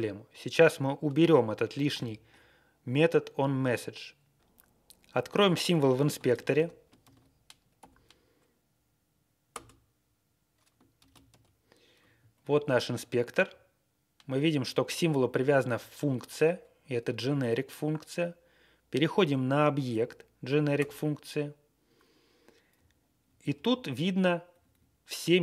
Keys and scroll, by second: 6.0 ctrl+c, 6.4 shift+|, 7.0 ctrl+a, 7.7 ', 9.4 Return, 11.0 ctrl+x, 12.3 Page_Down, 12.6 Page_Down, 13.4-14.1 Right, 14.4 Right, 14.6 Right, 14.7 Right, 15.3 Right, 15.5 Right, 15.6 Right, 15.8 Right, 20.7 Return, 22.7 Down, 23.0 Down, 23.0 Down, 23.0 Down, 23.1 Down, 23.1 Down, 24.4 Up, 24.6 Up.